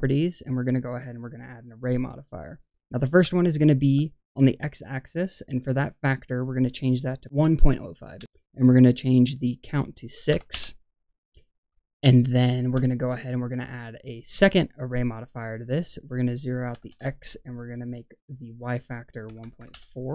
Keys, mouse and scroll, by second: 2.6-3.1 scroll down 2, 3.3-3.7 shift+middle drag, 6.2-8.1 drag, 9.2-10.5 drag, 11.3-11.6 scroll down 1, 11.7-12.6 shift+middle drag, 13.3-14.1 drag, 15.8-16.9 drag, 17.9-19.7 drag.